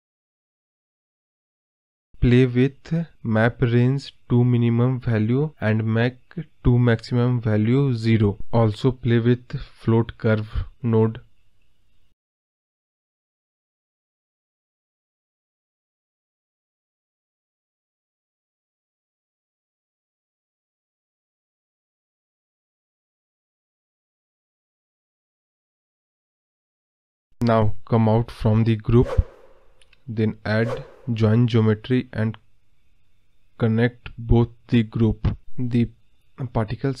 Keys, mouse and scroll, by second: 0.8 ctrl+z, 1.3 click, 3.9-5.3 drag, 5.3 scroll up 1, 5.5-6.6 middle drag, 7.0 scroll down 1, 8.1-10.5 drag, 13.5-16.6 drag, 19.1 click, 19.6 g, 21.3 ctrl+z, 22.6 g, 28.0-33.0 drag, 34.9 click, 35.5 scroll down 1, 35.7-37.0 middle drag.